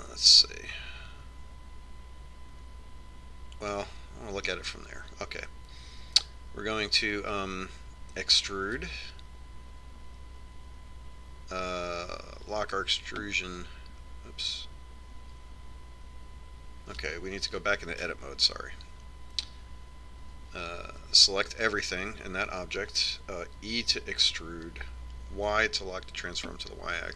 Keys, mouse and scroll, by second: 0.5-2.2 middle drag, 9.4 e, 13.5 y, 18.9 Tab, 22.0 a, 24.9 e.